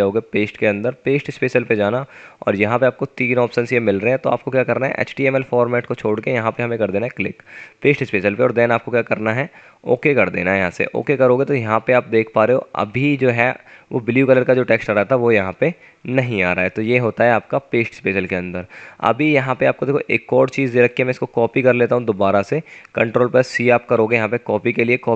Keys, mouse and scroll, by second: 11.5 click, 13.2 F9, 24.3 ctrl+c, 24.5 typing.